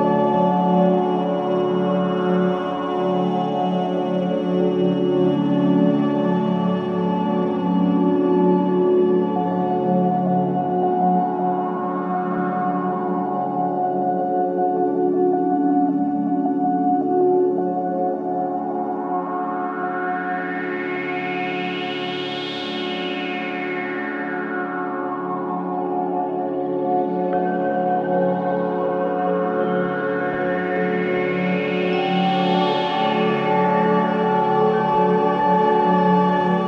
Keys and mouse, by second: 0.0 typing, 0.3-1.1 drag, 1.8-2.5 drag, 3.6-4.0 typing, 5.2-7.1 typing, 5.5 click, 7.8-8.8 drag, 8.8-9.6 typing, 11.6 click, 12.1 click, 13.5-14.3 typing, 13.6 click, 13.8-14.4 drag, 15.5-16.3 drag, 16.1-16.8 typing, 17.9 shift+click, 18.6-19.0 typing, 20.0 shift+click, 21.2-22.9 typing, 22.6 click, 24.0-25.8 typing, 24.1 click, 26.0-30.0 drag, 31.5-34.6 drag, 36.0 i, 36.1 click.